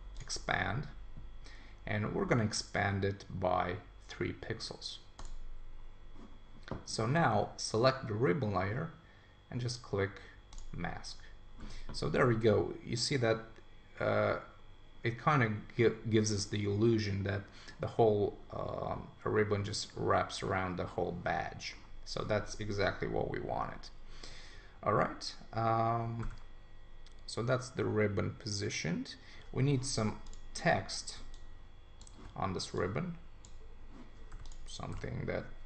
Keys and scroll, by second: 35.0 super+a.